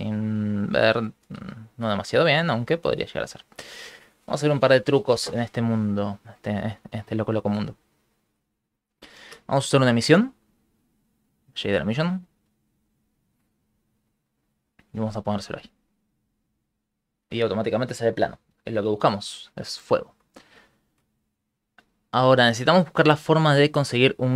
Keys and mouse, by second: 1.2 shift+space, 1.5 shift+middle click, 2.6 ctrl+middle click, 4.8 click, 5.2 x, 5.8 shift+middle click, 6.8 shift+middle click, 7.5 ctrl+middle click, 7.8 shift+middle click, 8.8 middle click, 9.2 shift+a, 15.0 click, 19.8 shift+middle click, 20.7 shift+middle click, 21.4 click.